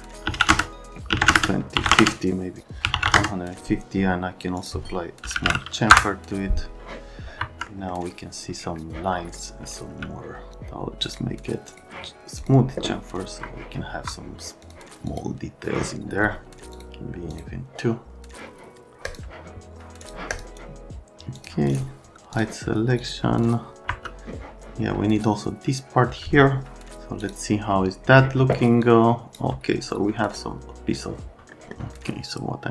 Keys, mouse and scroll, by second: 0.3-3.0 typing, 0.5 KP_Enter, 1.3 KP_Enter, 1.9 KP_Enter, 3.1 KP_Enter, 4.6 click, 5.1-6.0 typing, 7.4 F3, 7.7 right click, 9.1 right click, 9.3 middle click, 9.8 space, 11.1 click, 11.7 click, 12.4 click, 13.2 F3, 13.9 F3, 14.6 click, 15.1 click, 16.7 click, 17.3 click, 19.1 click, 20.0 click, 20.3 click, 21.3 click, 21.7 scroll up 1, 22.3 middle click, 23.0 click, 23.5 click, 23.9 F3, 27.3 click, 28.8 click, 31.5 click.